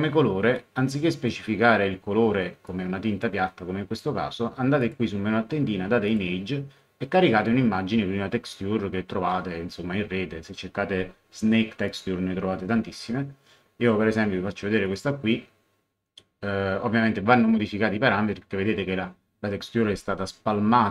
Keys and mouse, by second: 0.5 click, 2.6 click, 4.8 click, 6.0 click, 11.9 click, 14.8 click.